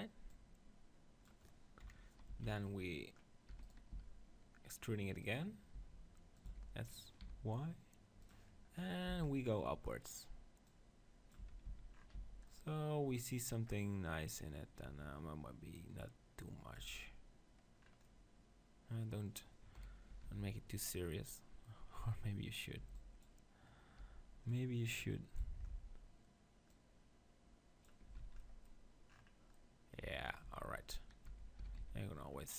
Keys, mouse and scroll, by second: 0.3-2.2 drag, 1.8 KP_7, 2.3 z, 3.5-6.5 typing, 3.7 click, 8.3-10.1 right drag, 9.1 z, 10.7-12.5 drag, 11.4 Tab, 11.6 z, 12.1 z, 14.8 Tab, 15.8-17.5 drag, 17.0 Tab, 17.8-19.8 middle drag, 19.8 KP_1, 20.2 Tab, 20.3 z, 22.8 b, 24.0 b, 25.7-26.7 middle drag, 26.7-28.1 drag, 28.1 Tab, 28.2 z, 28.4-30.4 middle drag, 30.0 Tab, 30.4 Tab, 31.3 Tab, 31.7 s.